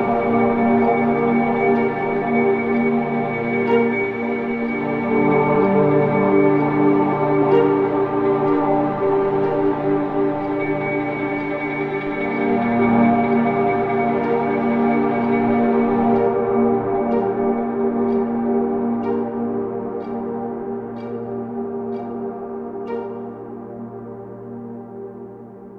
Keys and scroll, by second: 6.2 Delete, 6.5 ctrl+z, 7.6 Delete, 12.8 ctrl+d, 13.0 Escape, 21.9 ctrl+z.